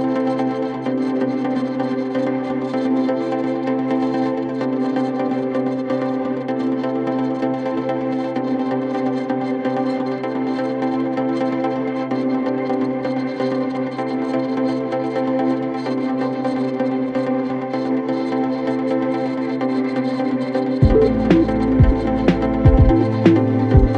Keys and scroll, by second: 1.1 ], 7.9 ], 17.3 ], 20.8 F1.